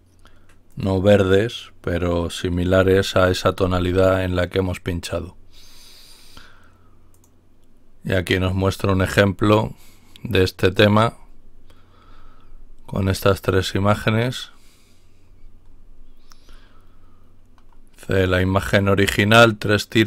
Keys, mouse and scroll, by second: 0.8 click, 3.3 ctrl+y, 7.1 click, 11.0-11.6 scroll down 2, 12.0-12.9 scroll down 2, 13.2-14.1 scroll down 4, 15.2-16.1 scroll up 2, 16.4-16.9 scroll up 2.